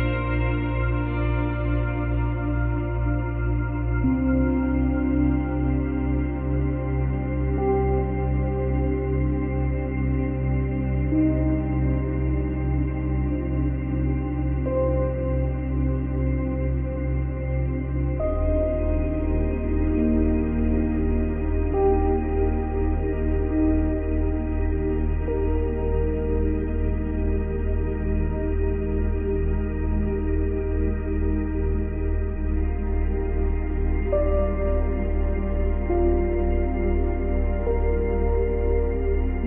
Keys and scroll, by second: 12.4 ctrl+z, 15.4 space, 18.1 space, 28.4 space, 30.8 space.